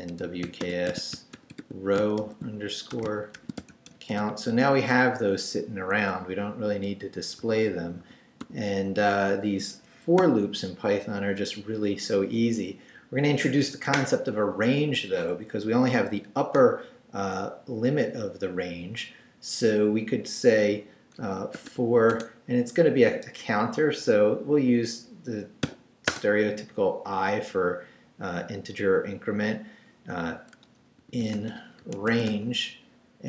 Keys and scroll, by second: 0.0-4.2 typing, 4.9 Down, 6.0 Escape, 6.9 d, 8.8 Up, 9.7 Escape, 10.2 o, 21.2-22.2 typing, 25.6 i, 26.1 space, 30.8-33.2 typing.